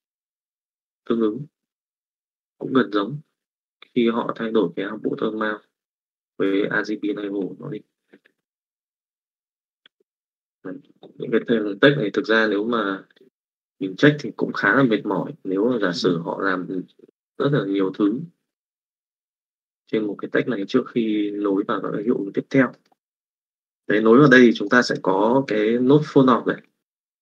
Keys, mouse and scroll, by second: 8.9 click, 9.7 x, 9.9 click.